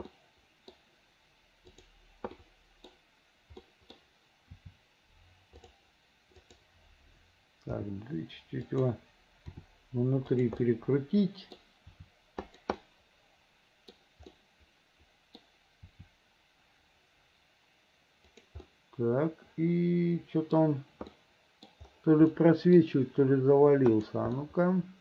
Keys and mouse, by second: 0.3 middle click, 1.9 click, 2.5 middle click, 3.7 middle click, 4.7 r, 8.8 g, 9.6 r, 10.8 middle click, 12.0 r, 13.0-14.1 middle drag, 14.4-15.6 middle drag, 16.6 r, 18.8-20.7 middle drag, 21.3 middle click, 22.5 middle click, 24.1 click, 24.5-25.0 middle drag.